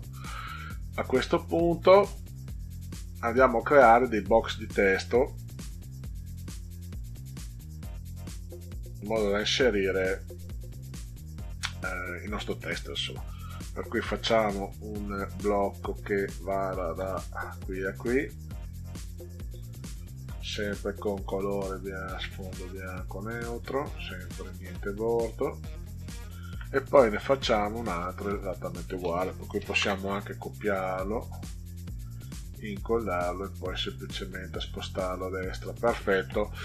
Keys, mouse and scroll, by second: 1.0-2.0 middle drag, 13.7 click, 16.1-18.2 drag, 21.0 click, 22.3 click, 23.5 click, 25.2 click, 27.7 click, 29.5 ctrl+c, 29.7 ctrl+v, 32.1-33.1 drag, 33.8 click, 34.5 click, 35.8 click.